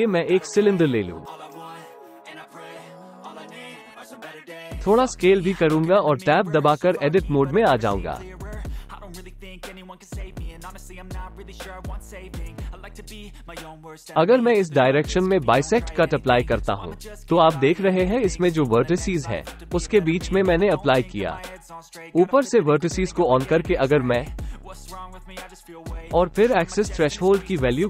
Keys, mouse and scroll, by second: 1.5 Tab, 1.7 click, 2.3 Delete, 3.3 q, 6.6 g, 7.2 z, 9.3 Tab, 10.2 KP_Decimal, 11.9-13.5 middle drag, 15.9 click, 26.8 click, 27.1 click, 27.2 click.